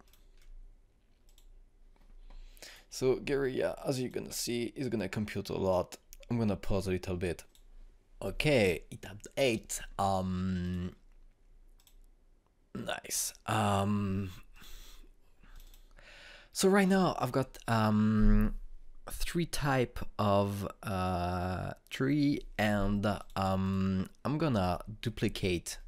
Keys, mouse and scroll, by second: 6.1 click, 8.4 click, 11.6 click, 15.5 click, 24.1 click.